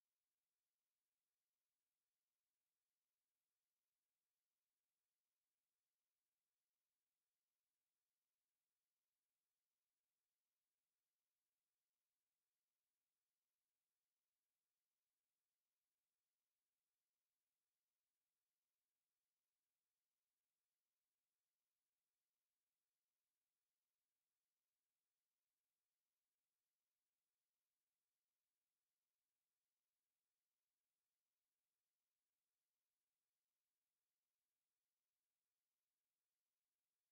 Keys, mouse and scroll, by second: 0.5 right click, 2.6 click, 4.1 click, 6.3 click, 9.1 click, 9.7 click, 10.6-11.8 drag, 11.9 click, 14.2 click, 15.1 click, 15.7-17.5 drag, 17.8 click, 22.9-24.5 drag, 26.5 click, 28.3 click, 33.6 click, 36.6 click.